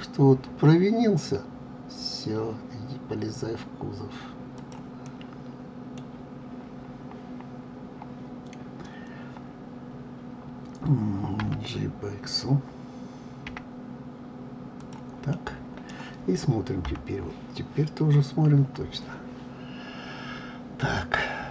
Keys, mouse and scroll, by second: 5.0-8.1 middle drag, 11.4 g, 15.3-16.8 middle drag, 16.8 KP_3, 18.0-21.5 scroll up 11.